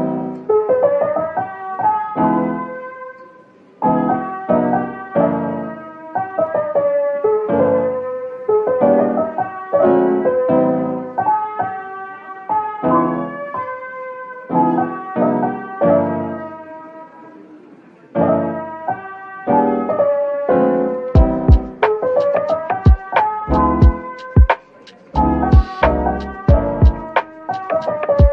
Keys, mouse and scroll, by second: 1.4 shift+click, 2.9 Tab, 4.9 alt+click, 5.5 middle click, 7.3 alt+click, 10.5 middle click, 12.3 typing, 13.4 typing, 15.6 Tab, 16.1-17.3 typing, 18.3 middle click, 20.9-21.2 scroll down 1, 21.2 middle click, 24.5 shift+click, 25.6-26.8 typing.